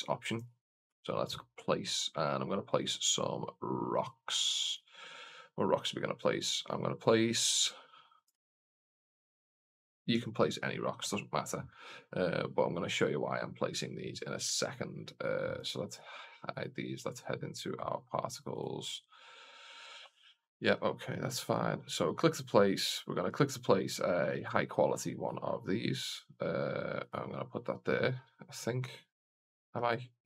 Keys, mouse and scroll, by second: 0.2 click, 2.5 click, 4.5-8.2 drag, 15.4 click, 16.4 click, 18.4 right click, 23.1-24.3 drag, 25.1 click, 26.9-28.5 drag.